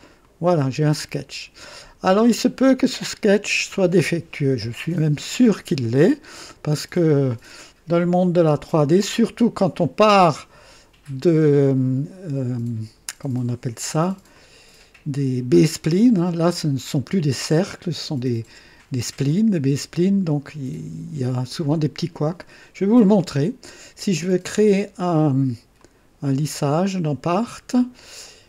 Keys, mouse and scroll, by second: 0.2 click, 8.6-9.8 drag, 14.3-15.4 drag, 20.2 click, 21.5 click, 23.2 right click, 25.7 click, 27.0 click.